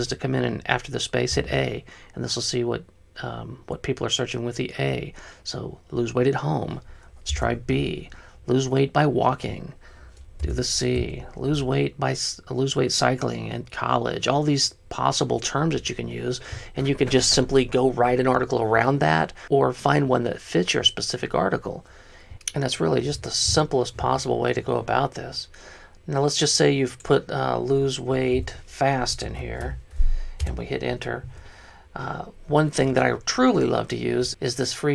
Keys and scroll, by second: 1.6 a, 7.5 BackSpace, 7.7 b, 10.7 BackSpace, 11.0 c, 28.6-30.1 typing, 30.5 Return.